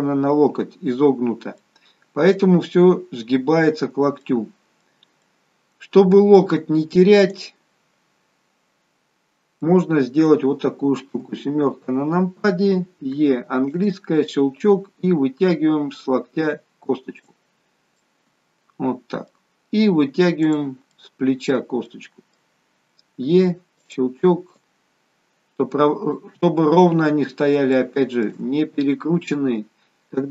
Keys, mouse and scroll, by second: 1.7 middle click, 4.5 middle click, 7.2 click, 9.8 middle click, 11.2 KP_7, 13.3 e, 14.9 click, 18.1 middle click, 20.5 click, 21.0 middle click, 21.9 middle click, 23.3 e, 24.6 click, 27.8 shift+middle click, 28.6-29.2 scroll up 3.